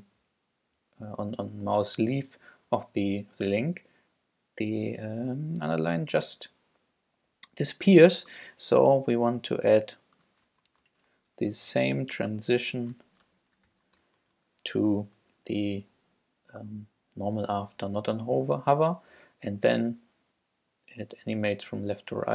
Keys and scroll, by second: 10.7 shift+super+Up, 10.9 super+Right, 11.1 shift+super+Left, 11.7 shift+super+c, 12.6 super+c, 13.3 shift+super+Return, 13.7 shift+super+Left, 14.0 shift+super+BackSpace, 14.2 super+v.